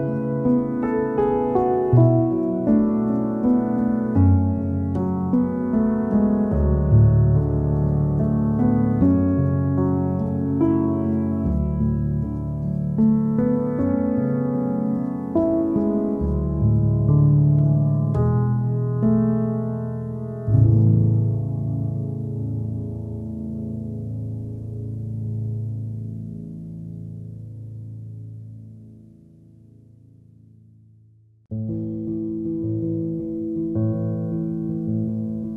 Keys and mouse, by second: 0.0-0.5 typing, 1.0 alt+middle click, 1.3 ctrl+z, 1.4 alt+middle click, 1.9 g, 2.2 alt+middle click, 3.1 shift+middle click, 3.9 shift+click, 4.0 alt+middle click, 4.4-5.5 alt+middle drag, 5.6 shift+click, 5.8 alt+middle click, 6.2-7.4 alt+middle drag, 7.6 middle click, 7.8 KP_1, 8.5 shift+middle click, 9.8 ctrl+alt+z, 9.8 alt+middle click, 10.3 s, 10.7 KP_1, 11.2 alt+middle click, 12.2 click, 12.4 alt+middle click, 13.2 shift+click, 13.5 alt+middle click, 14.0 shift+click, 14.0 alt+middle click, 14.5 alt+middle click, 15.0 s, 15.4 middle click, 16.5 3, 16.8 alt+middle click, 17.0 a, 17.2 s, 17.5 ctrl+z, 17.7 ctrl+z, 18.3 s, 18.6-19.9 alt+middle drag, 20.3 1, 20.4 alt+middle click, 20.6 KP_1, 21.1 shift+middle click, 21.4 g, 22.4 g, 23.2 alt+middle click, 24.1 middle click, 24.6 g, 25.1 alt+middle click, 25.8 Tab, 26.6-27.6 drag, 27.8-29.1 alt+middle drag, 29.3 middle click, 29.5 KP_1, 29.9 KP_3, 30.1 KP_1, 30.4 Tab, 31.0 3, 31.1 click, 31.4-32.5 alt+middle drag, 32.6 click, 32.8 alt+middle click, 33.2 Tab, 33.2 click, 33.4 alt+middle click, 33.7 middle click, 34.0 Tab, 34.4 alt+middle click, 35.3 3, 35.4 click.